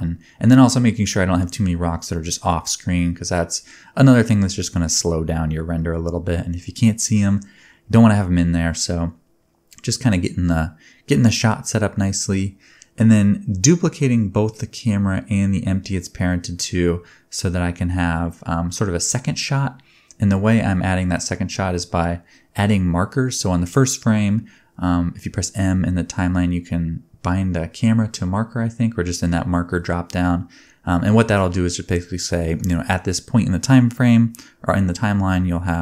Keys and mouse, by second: 2.1 space, 2.8-3.9 middle drag, 2.8-3.9 right drag, 6.6 shift+d, 9.9 click, 10.3 click, 10.7 middle click, 10.7 right click, 12.2 click, 12.5-13.5 drag, 15.5 click, 17.2 g, 18.2 ctrl+click, 21.7-25.0 drag, 21.7-25.3 middle drag, 21.7-25.0 right drag, 25.3-27.4 drag, 32.2 middle click, 32.4-33.6 drag, 34.0-35.0 middle drag, 34.0-35.8 typing, 34.7 alt+a.